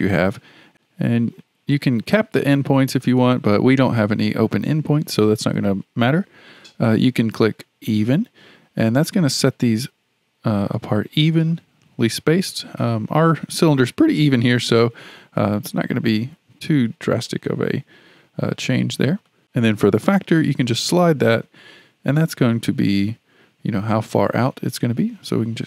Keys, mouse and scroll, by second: 2.5 click, 3.0 click, 8.1 click, 9.3-12.3 drag, 17.5 click, 18.7 click, 19.3 click, 19.8-22.9 drag.